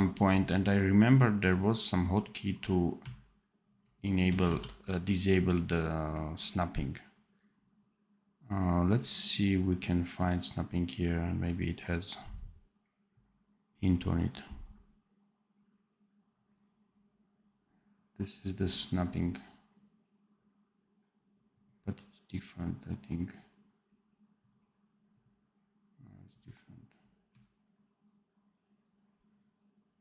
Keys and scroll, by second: 4.3 ctrl+z.